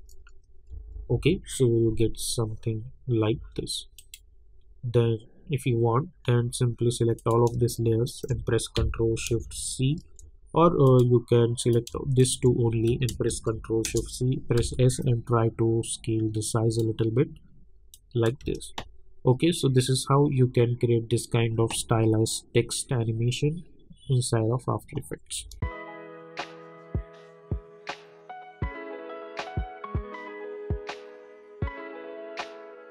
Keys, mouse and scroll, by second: 0.7 -, 1.0 -, 1.2 -, 3.3 space, 4.0 click, 7.1 click, 8.1 shift+click, 10.8 click, 12.2 shift+click, 13.3 ctrl+shift+c, 13.8 Return, 14.6 s, 15.0-17.9 drag, 18.4 space, 25.4 space.